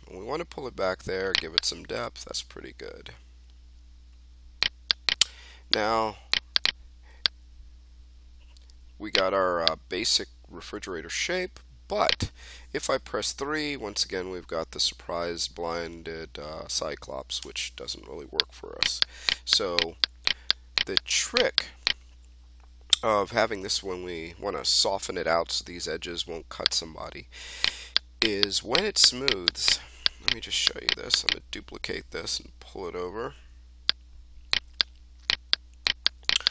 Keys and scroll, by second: 13.2 3, 17.3 1, 31.7 ctrl+d, 32.9 w.